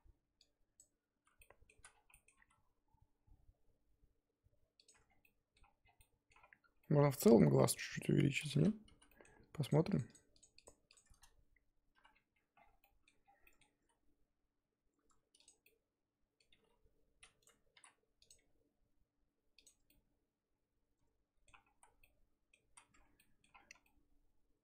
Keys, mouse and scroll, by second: 0.8 click, 1.2 z, 1.4 middle click, 1.7 z, 1.9 scroll down 4, 2.0 scroll up 1, 2.1 middle click, 2.3 s, 4.9 Tab, 5.0 scroll down 1, 5.2 middle click, 5.8 scroll down 3, 6.0 middle click, 6.3-7.1 scroll up 10, 6.8 middle click, 7.1 Tab, 7.3 z, 7.6 middle click, 7.9-8.5 scroll up 1, 8.5 3, 8.6-8.9 scroll up 1, 8.9 z, 9.1 middle click, 9.7 click, 10.1 shift+click, 10.6 shift+click, 10.9 shift+click, 11.9 ctrl+KP_Add, 12.5 scroll down 1, 12.7 scroll up 1, 12.8 middle click, 13.2 scroll down 3, 13.4 middle click, 13.7 s, 15.7 middle click, 16.5 g, 17.7 r, 18.4 g, 19.7 Tab, 19.9-21.8 middle drag, 21.8 z, 21.9 scroll down 2, 22.0 middle click, 22.6 z, 22.9 Tab, 23.2 middle click, 23.5-23.8 scroll up 4, 23.8-24.6 middle drag.